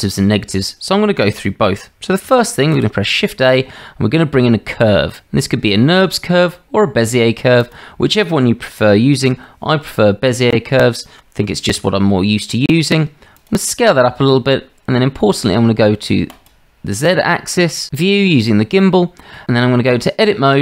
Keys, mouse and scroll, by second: 1.5-1.8 shift+drag, 2.6 shift+a, 9.3 g, 11.8 s, 16.4 click, 18.8-19.3 shift+drag, 19.5 Tab.